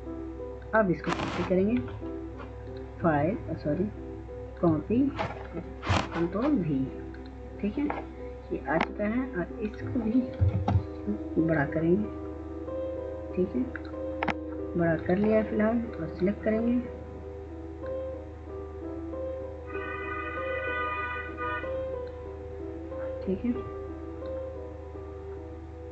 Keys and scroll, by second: 10.6 ctrl+space.